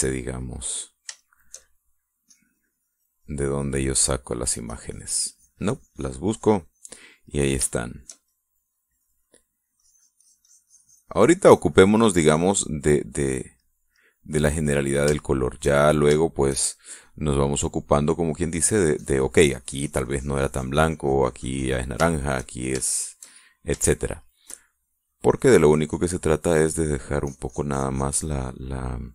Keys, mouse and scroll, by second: 0.1 middle click, 0.6-1.0 scroll down 1, 1.0 click, 1.3 middle click, 1.8-2.8 shift+middle drag, 2.9-7.9 shift+drag, 7.4 middle click, 8.3 shift+middle click, 9.4-13.9 drag, 13.3 middle click, 15.8 shift+middle click, 16.8 shift+middle click, 18.0 shift+middle click, 19.2-22.6 drag, 22.7 shift+middle click, 23.5 shift+middle click, 24.0 shift+middle click, 26.0 click, 27.0 middle click, 27.9-29.1 drag.